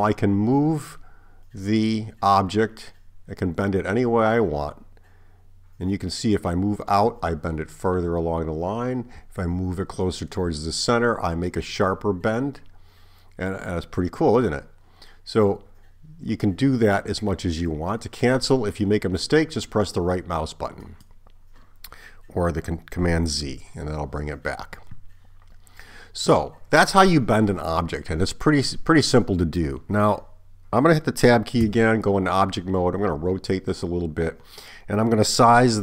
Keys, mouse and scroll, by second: 23.4 super+z, 31.7 Tab.